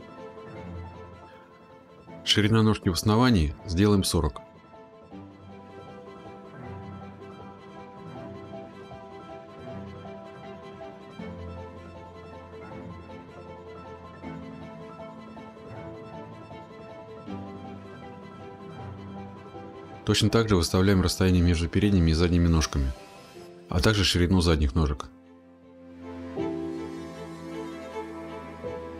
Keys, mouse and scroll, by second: 1.3 click, 11.4-11.7 typing, 12.3 Return, 13.3-14.9 scroll, 13.7-14.4 typing, 14.9-15.6 scroll, 16.4-17.6 scroll, 19.6 click, 20.5-21.8 scroll, 27.1 click, 27.3 middle click, 27.5-28.7 scroll.